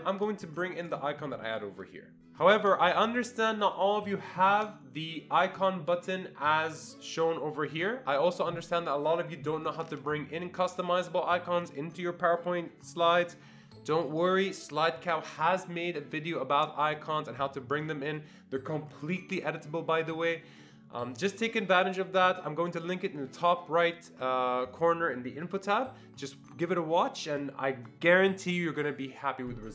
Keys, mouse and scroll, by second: 0.8 click, 4.4 click.